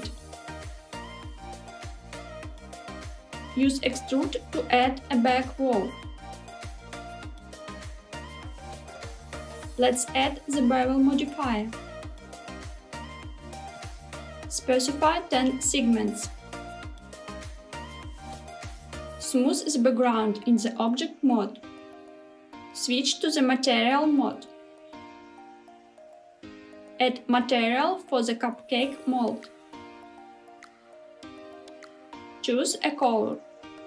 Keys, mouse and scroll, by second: 0.8 s, 3.1 click, 3.4 Tab, 4.7 click, 5.7 e, 6.4 z, 9.2 click, 9.8-13.8 drag, 14.3-18.3 drag, 19.1 Tab, 21.2 right click, 25.6 click, 26.6 click, 27.6 click, 29.4 click, 31.6 click, 33.0 click.